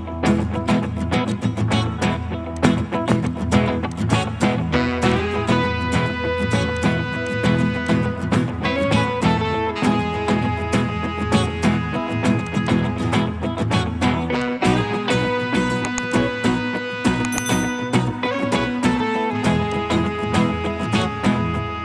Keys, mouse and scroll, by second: 4.4 double click, 10.6 middle click, 12.6 double click, 13.8-14.6 typing.